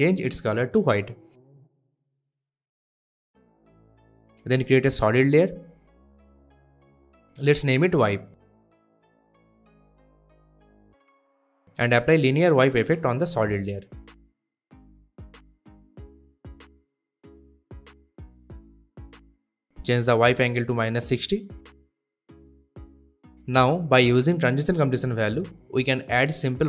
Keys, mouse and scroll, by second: 4.3 click, 4.6 right click, 5.0 click, 6.9-8.2 typing, 8.6 Return, 10.4-11.0 click, 13.0-16.0 typing, 16.7 click, 19.3 click, 22.0-23.3 typing, 24.6-26.6 drag.